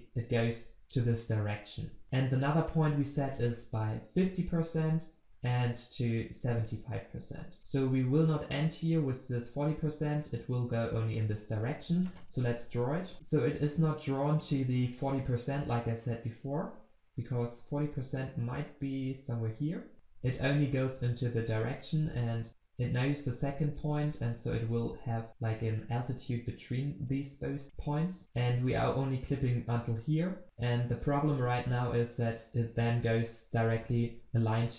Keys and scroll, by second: 2.0 ctrl+v.